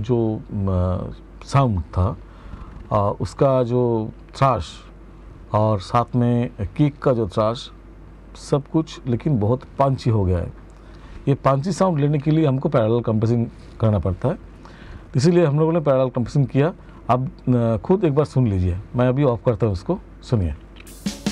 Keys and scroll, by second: 20.1 space.